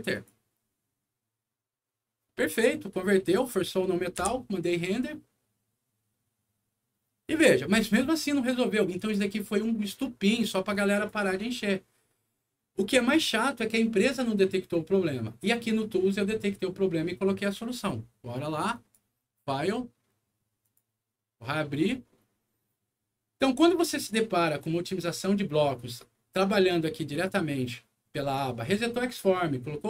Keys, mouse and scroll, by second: 0.1 click, 3.2 click, 4.1 F9, 8.9 click, 10.7 click, 18.7 click, 20.6 click, 23.9 click, 27.1 click.